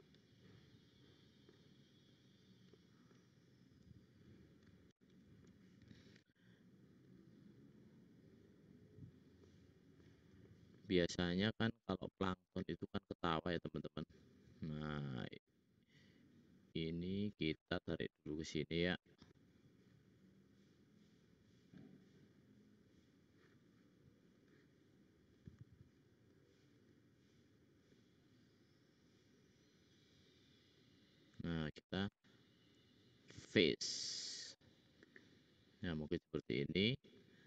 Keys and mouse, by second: 0.5-2.1 middle drag, 3.6 click, 6.2 `, 7.0 middle click, 7.3 click, 7.3 middle click, 7.3 right click, 7.6 click, 7.6 middle click, 7.6 right click, 11.3 `, 12.3-14.3 drag, 16.2 shift+click, 16.5 shift+click, 18.3 click, 18.3 middle click, 18.3 right click, 19.2 click, 23.3-24.4 middle drag, 25.3-26.2 shift+drag, 28.4 shift+click, 28.7 shift+click, 29.3 shift+click, 29.8 shift+click, 30.7 shift+click, 32.0 x, 36.1 middle click.